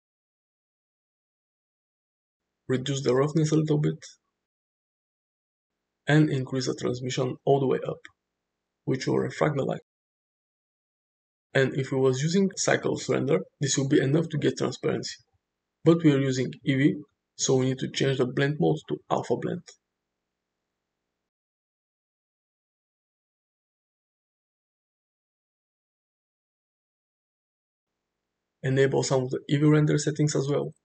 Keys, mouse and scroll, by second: 3.8-5.3 drag, 5.9 shift+middle drag, 7.9-9.4 drag, 9.9-12.1 middle drag, 12.7-16.5 middle drag, 22.1-23.8 drag, 24.5 middle click, 29.7 click.